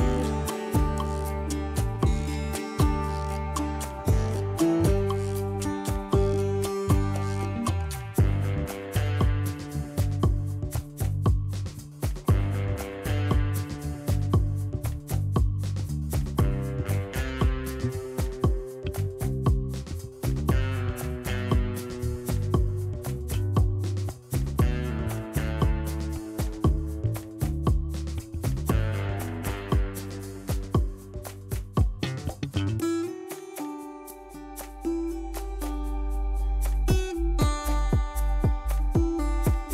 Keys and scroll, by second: 12.8 ctrl+shift+z, 14.9 0, 17.8 ctrl+z, 29.8 ctrl+z, 34.2 ctrl+z, 35.1 ctrl+d, 36.3 ctrl+-, 37.9 z, 38.2 ctrl+=.